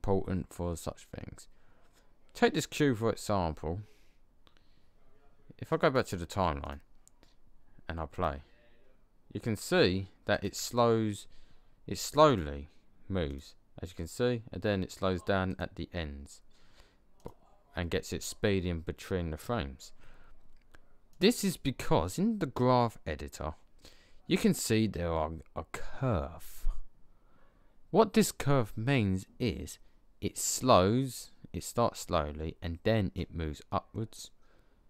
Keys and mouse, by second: 5.8-7.3 drag, 7.3 middle click, 8.2 click, 10.0 middle click, 12.0 click, 13.7 click, 13.9 click, 14.1 click, 15.2-16.0 middle drag, 21.0-22.0 drag.